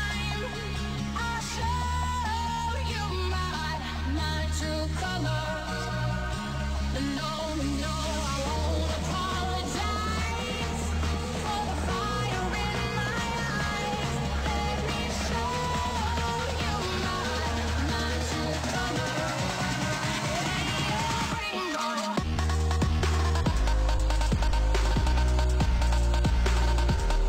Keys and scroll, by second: 7.5 ctrl+s, 14.3 ctrl+s, 16.4 v, 25.1 ctrl+space, 25.9 f.